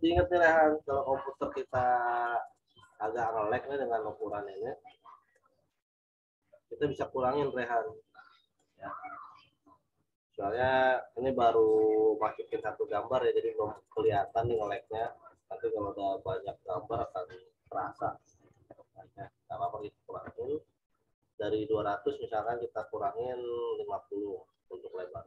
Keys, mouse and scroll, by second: 2.9 alt+click, 8.6 click, 12.5 click, 18.4 click, 22.4 click, 25.1-25.2 typing.